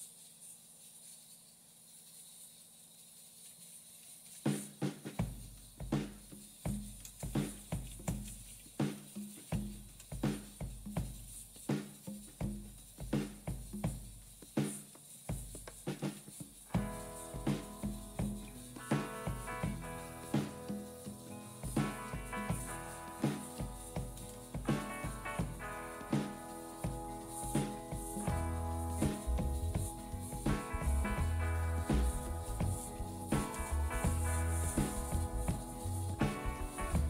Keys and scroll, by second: 0.9-2.4 typing, 2.5 Tab, 4.2-8.0 typing, 13.7 typing, 15.7-16.4 typing, 21.6 Return, 26.2 typing, 30.0-30.8 typing, 31.0 Return.